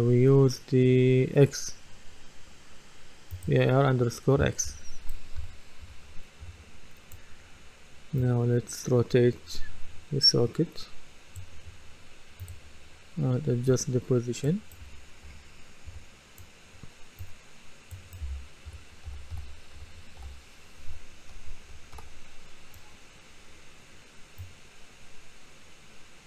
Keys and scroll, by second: 5.4-6.4 typing, 14.8-15.9 typing, 18.0-20.9 typing.